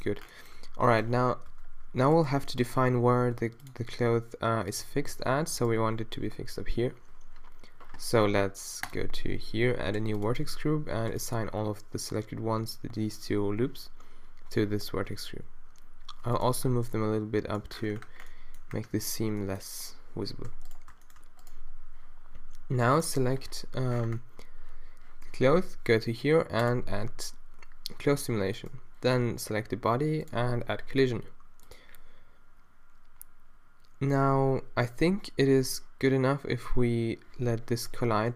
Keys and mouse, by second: 0.7 Tab, 1.6 Tab, 2.2 middle click, 3.3 ctrl+r, 15.0 g, 16.7 Tab, 17.0-18.6 middle drag, 20.7-23.0 drag, 23.0 middle click, 23.5-25.8 drag, 38.2 Tab.